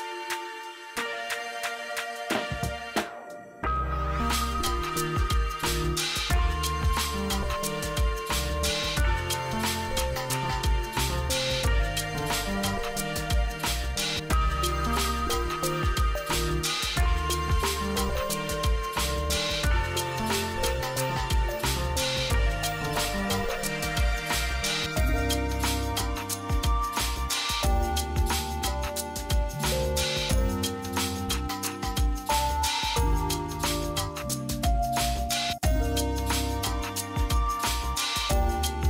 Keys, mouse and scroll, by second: 4.3 F3, 5.7-8.9 drag, 8.9 F2, 9.5-11.7 drag, 11.7-12.3 scroll down 1, 12.9 click, 15.1 t, 15.8 click, 18.8 b, 19.3 click, 22.0-26.2 drag, 26.2 space, 27.5-29.7 drag, 29.7 scroll up 1, 30.9-32.6 drag, 32.6 F3, 34.4 click, 37.0-38.8 drag.